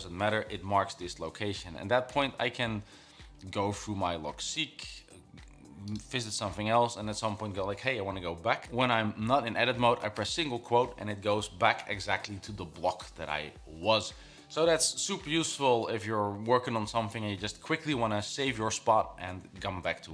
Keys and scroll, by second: 2.0-2.8 typing.